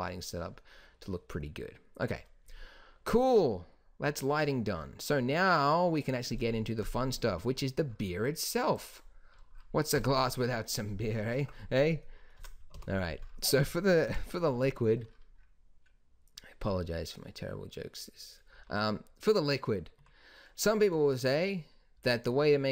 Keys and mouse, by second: 4.2 middle click, 5.0-6.7 middle drag, 8.2 click, 8.9 click, 9.1-10.6 drag, 12.9 KP_7, 14.2 KP_5, 18.7 z, 20.1 Tab, 21.1 z, 22.1 z.